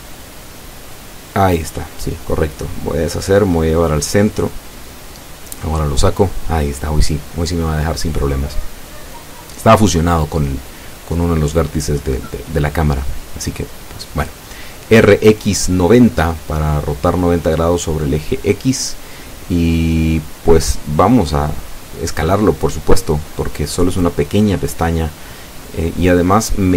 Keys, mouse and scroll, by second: 3.4-4.7 drag, 4.6 ctrl+z, 5.4 a, 7.2 shift+right click, 8.3 l, 9.1-10.3 drag, 10.1 ctrl+z, 14.0-15.3 drag, 22.0 r, 22.2 x, 22.3 KP_9, 22.4 KP_0, 22.5 KP_Enter, 23.7-25.8 middle drag.